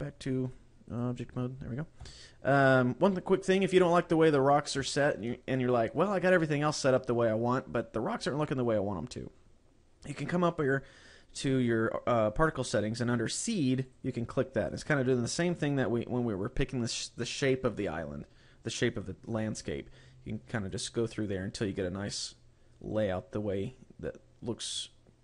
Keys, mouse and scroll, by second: 0.4 click, 1.0 click, 2.0 KP_0, 4.5-4.8 scroll down 1, 4.8 shift+middle click, 13.8 click, 20.5 click, 21.1 click, 22.8 click, 24.9 scroll down 1.